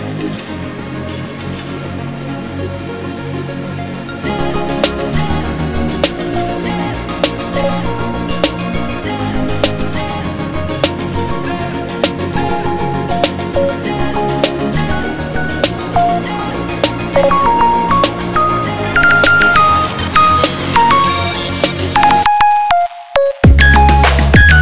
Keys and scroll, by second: 16.3 ctrl+z, 19.9 c.